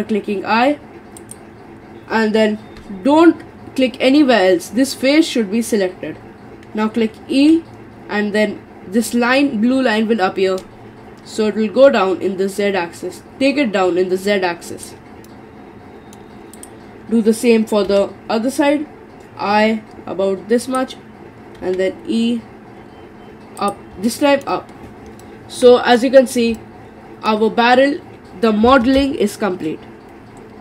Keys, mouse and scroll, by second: 7.3 e, 15.3-16.5 middle drag, 16.5 click, 17.9 i, 21.6 e, 24.1-30.6 middle drag.